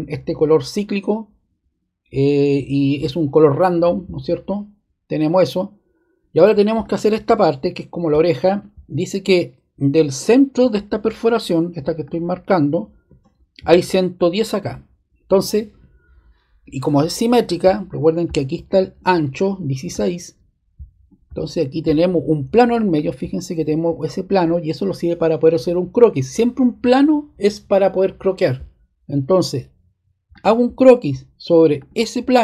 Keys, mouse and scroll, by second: 3.6 click, 6.8 click, 8.1-9.4 drag, 12.0-13.3 drag, 15.2-16.5 drag, 19.9-21.0 drag, 22.9-24.0 drag, 30.3-31.5 drag, 31.7 click, 32.1 click.